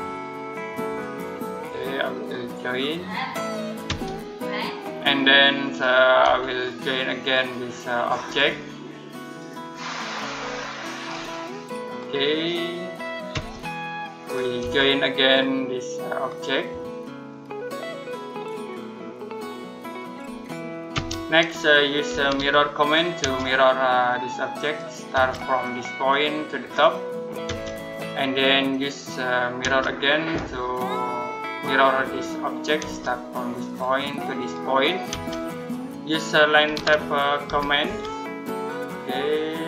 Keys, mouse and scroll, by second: 3.7 space, 4.2-4.5 scroll down 1, 4.5 middle click, 5.0-6.1 scroll up 1, 6.1 space, 7.0 click, 10.1-10.4 scroll down 1, 10.4 middle click, 10.8-11.7 scroll up 1, 11.7 click, 13.2 space, 13.4 scroll down 1, 13.7 middle click, 14.1-14.4 scroll up 1, 14.4 space, 15.1 click, 20.0 scroll down 1, 20.3 middle click, 20.8 space, 21.9 m, 23.0 space, 24.5 click, 25.0 space, 25.9 click, 27.3 space, 27.7-28.1 scroll down 1, 28.1 middle click, 29.5 space, 31.8 click, 32.7 space, 33.5 click, 34.9 space, 36.2-37.7 typing, 39.5 Escape.